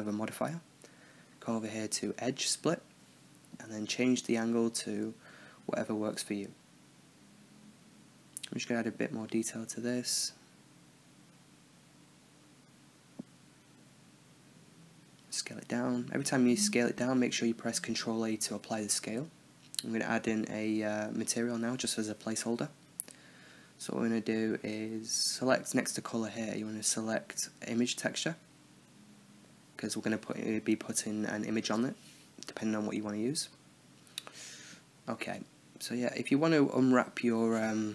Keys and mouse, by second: 0.3-1.2 drag, 2.5-3.6 middle drag, 3.6-4.9 drag, 6.5-7.6 middle drag, 7.6 Tab, 8.1 click, 8.3-9.2 middle drag, 9.2 click, 9.8 ctrl+z, 11.1-11.8 drag, 12.1-13.0 middle drag, 13.0 click, 13.4 Tab, 14.8 s, 15.8-16.2 drag, 16.0 ctrl+a, 18.0-21.6 drag, 21.6 t, 22.1-23.5 drag, 24.0 click, 24.9-27.1 middle drag, 27.1-28.0 drag, 34.1-35.2 middle drag, 35.2 Tab, 37.0 click, 37.4-37.9 drag.